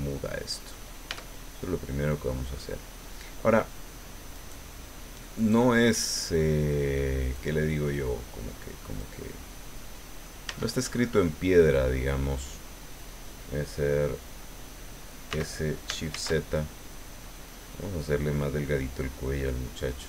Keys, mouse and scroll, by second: 0.2 click, 1.1 Tab, 2.1 click, 2.8-3.1 scroll up 2, 4.3 right click, 5.4 right click, 5.8 middle click, 7.3-9.1 drag, 9.3 scroll down 2, 9.8 click, 10.5 Tab, 10.9 middle click, 15.3 s, 16.1 shift+z.